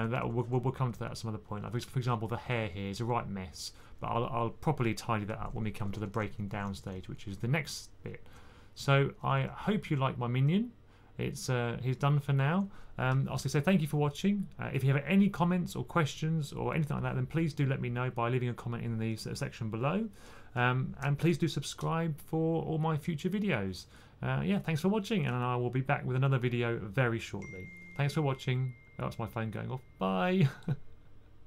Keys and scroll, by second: 0.0-0.3 typing, 1.6-2.8 typing, 5.5-6.5 typing, 8.9-9.7 typing.